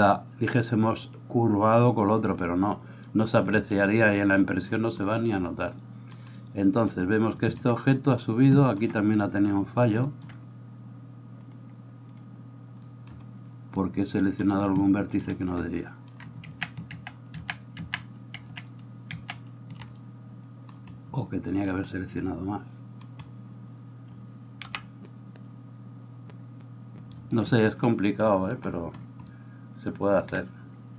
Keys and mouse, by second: 16.5 ctrl+z, 17.2 ctrl+z, 17.5 ctrl+z, 17.9 ctrl+z, 18.5 ctrl+z, 18.5 right click, 19.2 ctrl+z, 19.2-30.9 ctrl+drag, 24.6 g.